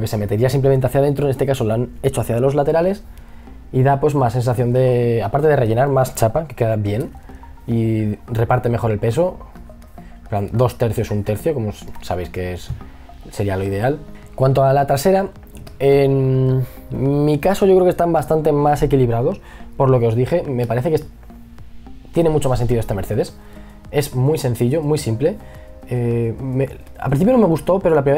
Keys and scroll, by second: 3.6 e, 4.5 b, 20.2 space, 22.8 b.